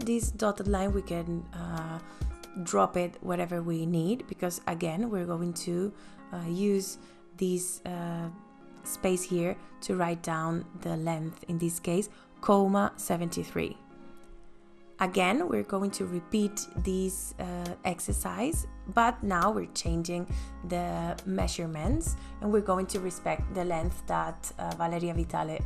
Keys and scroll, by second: 10.6 ,, 10.9 KP_7, 11.4 KP_3, 13.2 KP_Enter, 24.1 KP_2, 24.4 ,, 24.7 KP_3, 24.9 KP_5.